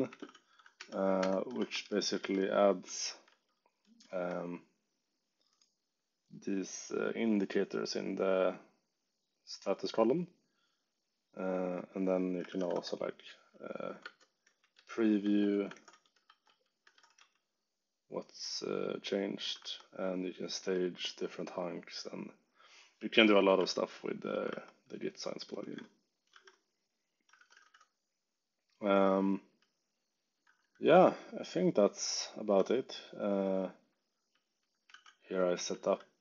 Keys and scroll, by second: 0.1 shift+v, 0.7 shift+5, 1.1 g, 1.6 Escape, 1.7 k, 2.3 ctrl+u, 12.2-13.1 typing, 14.1-17.6 typing, 19.5 Escape, 20.0 j, 20.6 k, 23.4 shift+v, 24.4 Escape, 24.5 u, 25.6-28.0 typing, 29.1 j, 30.4 ctrl+d, 32.9 k, 34.0 j, 34.8 shift+v, 35.7 ctrl+d.